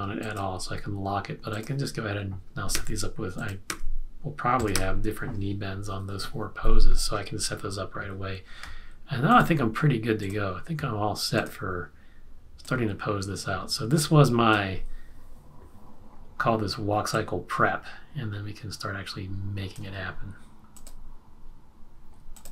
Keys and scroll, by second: 2.7 F6, 3.8 F6, 4.9 F6.